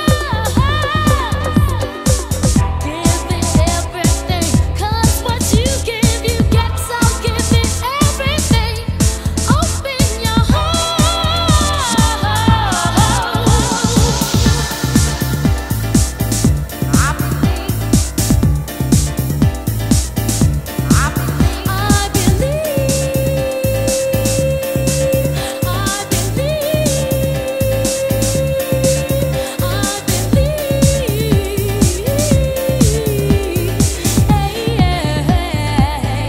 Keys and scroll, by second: 9.1 super+space, 11.6 super+c, 12.8 super+v, 26.3 super+Tab.